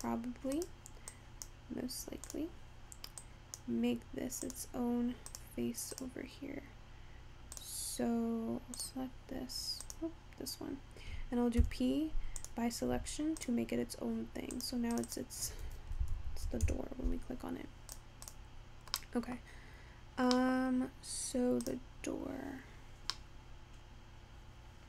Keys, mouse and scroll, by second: 0.1 click, 0.7 click, 1.2 click, 2.4 click, 3.3 click, 4.6 click, 5.4 click, 6.1 click, 7.2-7.7 scroll down 1, 7.7 click, 8.8 click, 9.9 click, 11.6 p, 13.0 Tab, 13.5 click, 14.6 click, 15.2-16.3 drag, 16.3 o, 18.0 click, 18.3 click, 19.3-20.1 middle drag, 20.1 scroll down 3, 20.4-21.2 middle drag, 21.2-21.7 scroll up 1, 21.7 click, 22.5-23.1 scroll up 3, 23.1 scroll down 5, 23.2-24.8 middle drag.